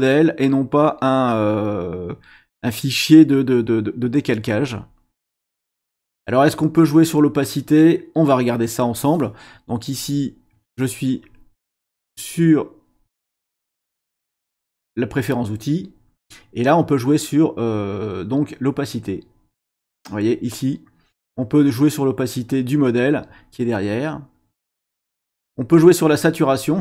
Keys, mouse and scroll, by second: 3.3-5.8 drag, 9.9 click, 15.1 click, 19.0-25.8 drag, 26.6-26.8 drag.